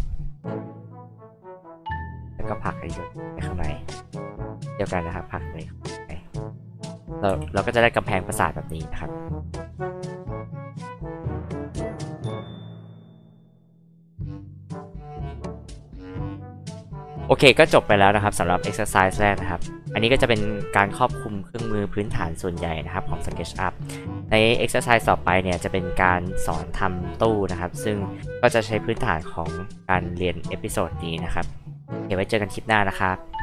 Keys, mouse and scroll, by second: 1.2-3.5 drag, 5.0-6.1 drag, 6.5 click, 7.3 h, 7.4-7.8 drag, 11.6 click, 13.9 click, 15.0 click, 15.2 click, 17.4 click.